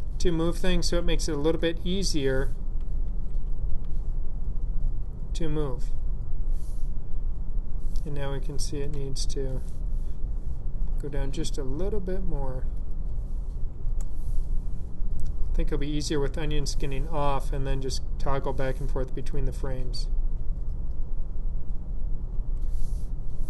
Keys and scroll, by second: 2.9 ', 5.6 typing, 8.8 Down, 13.7 Down, 19.5 ,, 20.2 ., 22.2 ,.